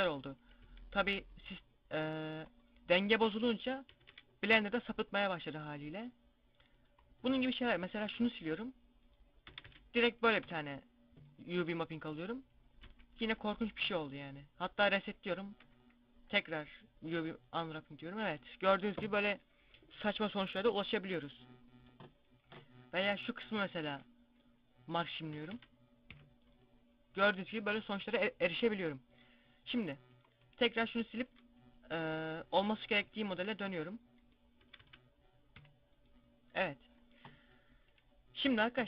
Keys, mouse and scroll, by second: 0.0 scroll down 1, 0.5 z, 0.9 z, 1.2 right click, 2.3 right click, 3.8 a, 4.0 a, 6.8 right click, 8.0 ctrl+e, 9.3 a, 9.5 a, 10.2 u, 11.7 scroll up 1, 12.3 scroll up 1, 12.3 scroll down 1, 12.6 a, 13.0 a, 13.6 u, 16.1 u, 22.3 right click, 23.7 ctrl+e, 25.2 a, 25.4 a, 26.0 u, 30.1 right click, 31.1 ctrl+e, 32.5 right click, 33.1 ctrl+e, 34.5 a, 34.7 a, 35.4 u.